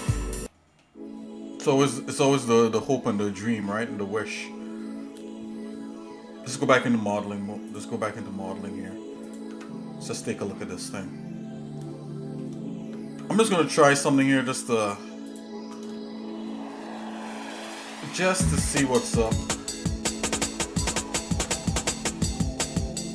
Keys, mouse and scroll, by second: 0.4 middle click, 1.5 scroll up 1, 2.1 scroll up 2, 2.8 scroll down 1, 4.2 scroll down 2, 7.9 click, 8.5 scroll up 1, 9.2 click, 9.5 Tab, 10.4-12.5 shift+middle drag, 13.0 ctrl+Tab, 14.1 click, 14.8 alt+shift+click, 15.2 alt+shift+click, 15.9 shift+middle click, 17.6 alt+shift+click, 18.3 shift+middle click, 19.1 shift+click, 19.8 shift+middle click, 20.2 shift+middle click, 20.6 shift+middle click, 22.0 ctrl+b.